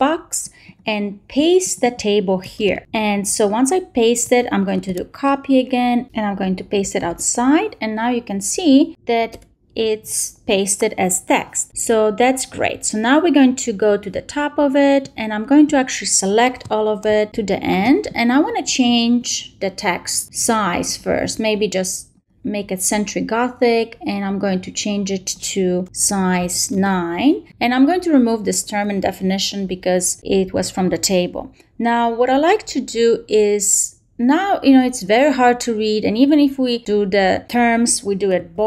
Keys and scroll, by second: 2.5 shift+super+v, 4.6 shift+super+a, 6.9 shift+super+v, 9.2 shift+BackSpace, 17.2 shift+super+Down, 26.3 shift+9, 26.6 shift+Return, 28.7 shift+BackSpace, 29.9 shift+Down, 30.1 shift+BackSpace, 38.4 shift+super+b.